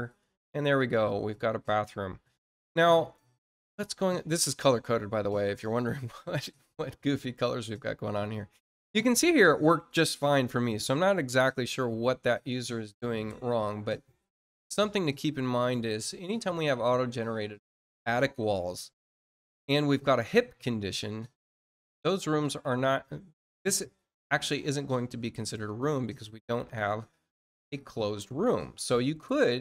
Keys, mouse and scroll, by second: 0.7 click, 13.4 click, 17.5 click, 21.5 click, 27.7 click.